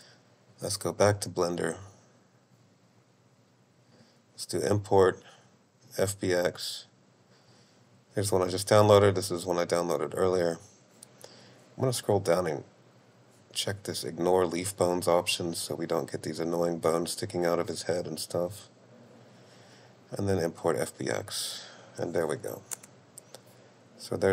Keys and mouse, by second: 2.1-4.8 drag, 5.1 click, 22.8 space.